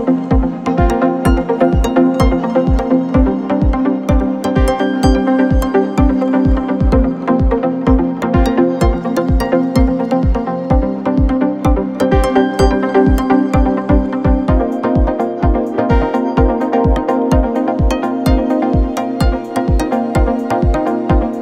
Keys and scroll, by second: 6.7 alt+Tab, 14.2 alt+Tab.